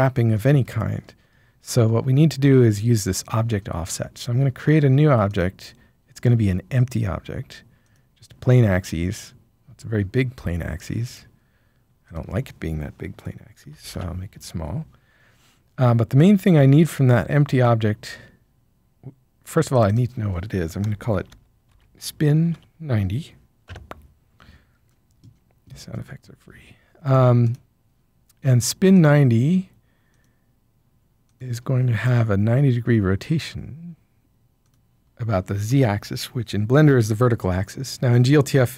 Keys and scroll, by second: 13.7 typing, 13.9 Return, 20.8-22.5 typing, 23.6 Return.